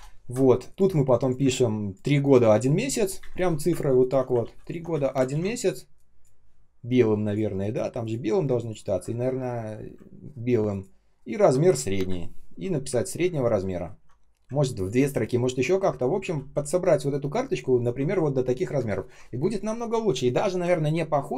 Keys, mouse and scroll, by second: 0.3 ctrl+scroll down 1, 0.6 ctrl+click, 1.3 space, 1.8 space, 1.9 space, 3.1 Delete, 3.9 ctrl+click, 4.3 ctrl+c, 4.5 ctrl+click, 5.2 ctrl+v, 8.5 ctrl+click, 10.1 ctrl+scroll down 1, 10.6 ctrl+click, 11.0-11.9 ctrl+scroll down 1, 11.9 Delete, 13.2 ctrl+scroll up 1, 13.7-14.7 ctrl+scroll down 1, 14.7 ctrl+click, 15.6 r, 16.4 ctrl+click, 17.0 ctrl+click, 18.9 ctrl+scroll down 1, 20.6 ctrl+scroll up 1.